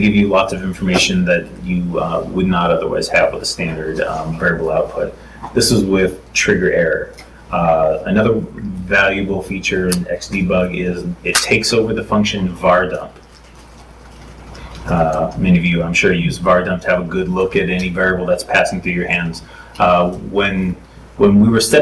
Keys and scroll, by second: 3.8 super+Tab.